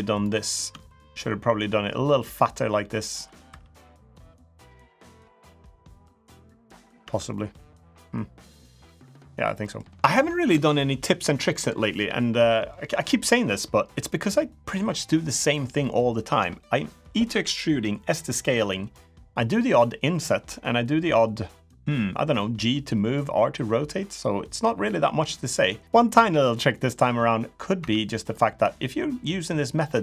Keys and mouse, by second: 0.6 shift+click, 0.9-2.6 drag, 2.9 2, 3.2 3, 3.5 click, 4.2-5.2 drag, 5.5 click, 5.8 middle click, 6.8 Tab, 7.1-8.2 middle drag, 8.6 middle click, 9.4 middle click, 25.3 middle click, 27.5 Tab, 28.0 click.